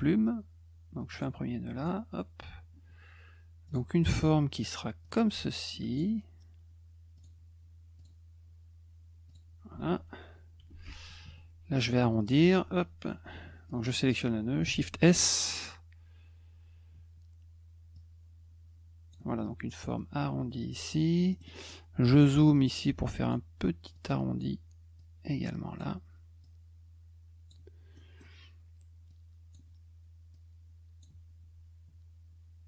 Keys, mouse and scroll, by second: 1.1 click, 1.8 click, 3.7 click, 5.0 click, 5.9 click, 7.1 click, 8.0 click, 9.3 click, 12.2 click, 13.7 click, 17.9-19.1 drag, 21.0 middle click, 21.3 middle click, 21.4 middle click, 21.4 scroll up 2, 21.6 middle click, 22.7 click, 23.9 click, 25.0 click, 26.4 click, 27.9 middle click, 29.1 click, 30.3 click.